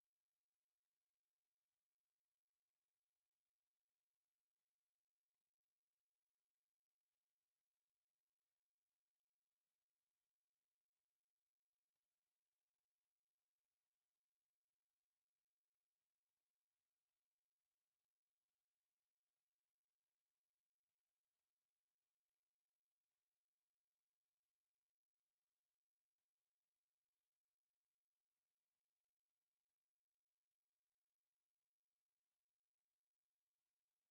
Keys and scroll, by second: 0.1 5, 0.2 Return, 0.7 Escape, 1.5-5.4 typing, 1.9 Escape, 2.7 Escape, 3.7 Escape, 4.8 Escape, 7.1 space, 9.4 Escape, 10.1 Escape, 10.3 t, 10.4 space, 10.9 Escape, 11.1 f, 11.2 space, 12.4 Escape, 15.0 Escape, 17.2 Escape, 18.2 s, 19.4 5, 19.5 Return, 21.4 s, 21.5 space, 23.5 1, 23.5 Return, 26.8 Escape, 29.1 Escape, 29.3 e, 29.4 space, 30.3 Escape, 31.1 m, 31.2 space, 31.8 Escape, 33.7 Escape.